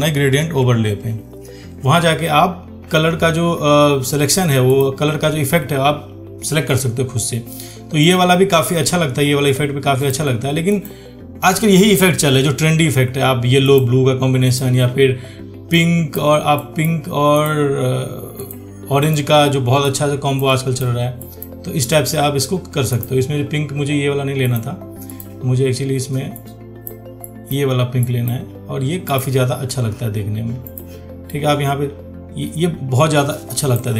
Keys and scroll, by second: 0.7 ctrl+1.